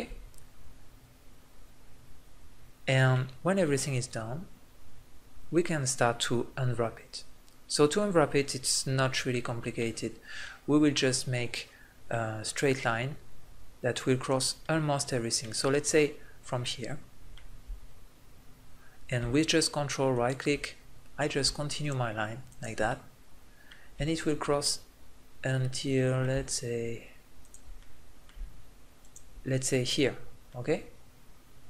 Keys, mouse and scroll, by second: 2.3-3.5 middle drag, 10.4-13.6 middle drag, 14.2 right click, 16.7-18.9 middle drag, 20.1 right click, 20.8-21.8 middle drag, 22.9-24.2 middle drag, 24.8 middle click, 27.4-30.7 middle drag.